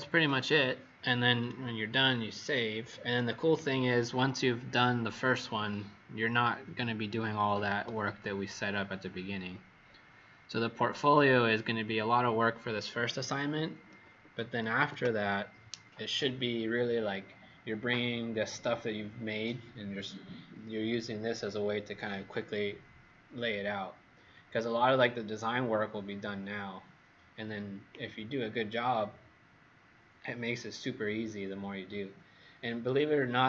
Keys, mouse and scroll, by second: 3.6-5.1 alt+scroll down 2, 5.1 scroll up 1, 8.8 alt+scroll up 1, 9.4 alt+scroll down 1, 14.7 ctrl+s.